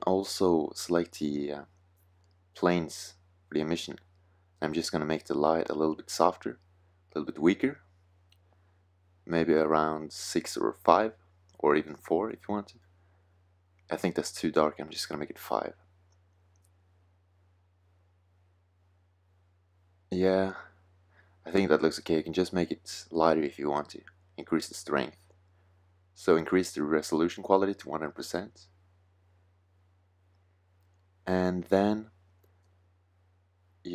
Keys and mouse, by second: 7.1 click, 9.5-11.4 drag, 12.5 KP_0, 14.8-17.1 drag, 24.9-29.5 drag.